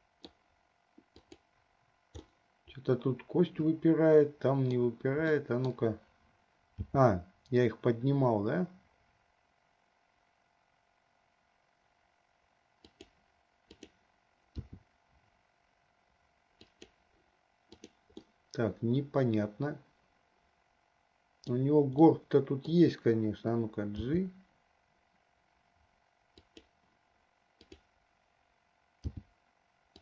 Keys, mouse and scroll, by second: 1.4 click, 2.5-5.1 middle drag, 5.7 middle click, 7.1 g, 14.0 click, 14.8 r, 18.1 click, 18.5-21.8 middle drag, 22.3 middle click, 24.2 g, 27.8 click, 29.3 g.